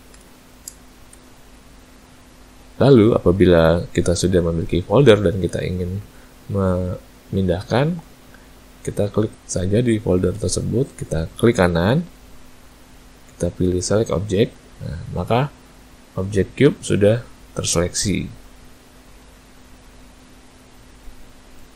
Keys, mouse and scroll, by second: 1.3 a, 12.2 right click, 16.3 click, 21.6 a.